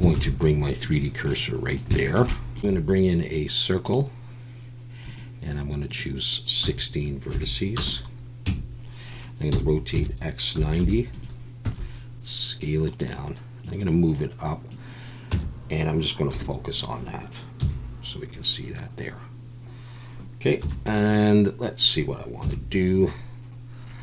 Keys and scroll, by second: 0.1 shift+s, 2.6 shift+x, 2.7 shift+a, 8.5 Tab, 9.5-11.6 typing, 15.3 Tab, 16.3 /, 17.6 KP_1, 20.6 KP_7, 22.4 KP_1.